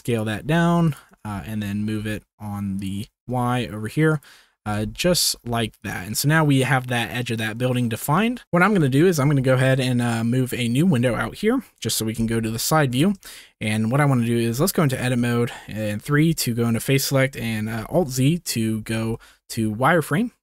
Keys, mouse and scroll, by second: 0.4 s, 0.8 click, 1.1 g, 1.7 y, 3.0 g, 3.1 z, 4.6 g, 4.8 x, 5.2 y, 7.5 middle click, 8.0 shift+middle click, 9.3 ctrl+s, 11.0-12.1 middle drag, 12.1 KP_3, 13.2-13.6 shift+middle drag, 14.3 Tab, 15.2 shift+middle click, 16.0 3, 17.9 alt+z, 18.9 alt+z, 20.1 click.